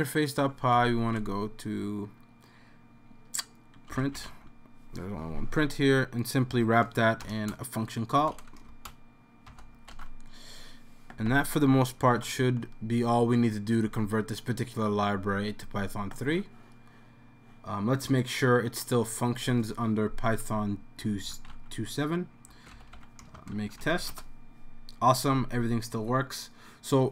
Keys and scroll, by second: 0.8 super+f, 3.7-4.7 typing, 6.4-8.2 typing, 9.7-10.4 typing, 12.1 super+s, 20.8-24.5 typing.